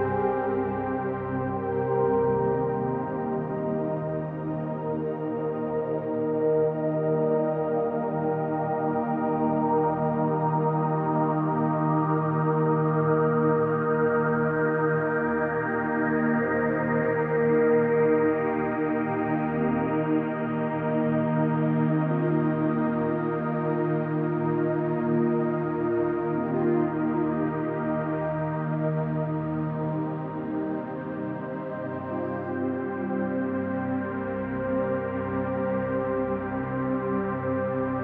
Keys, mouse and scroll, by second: 1.0 ctrl+alt+click, 2.5 alt+click, 8.2-11.3 alt+drag, 11.6-12.7 ctrl+alt+drag, 12.8-17.5 ctrl+alt+drag, 18.0-19.1 ctrl+alt+drag, 19.9 ctrl+s, 21.0 click, 24.2 click, 25.6 click, 26.3 click, 27.3 click, 27.9-28.9 drag, 30.0 ctrl+c, 31.5 ctrl+s, 32.2 click, 32.7 click.